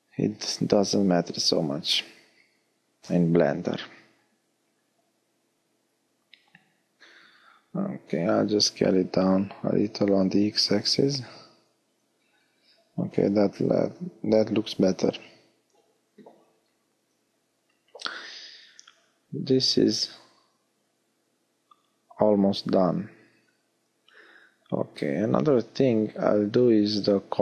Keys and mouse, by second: 4.4 s, 5.2-8.3 middle drag, 10.4-15.1 middle drag, 15.1 a, 16.4 middle click, 18.2-19.4 middle drag, 19.4 Tab, 21.0 Tab, 22.9-24.2 middle drag.